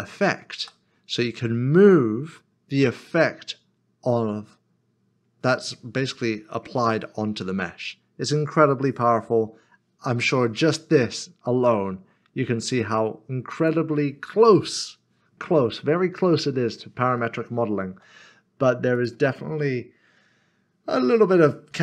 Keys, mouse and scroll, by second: 0.6 typing, 13.5 click, 16.2 middle click, 17.9 g, 18.9 click, 19.3 middle click.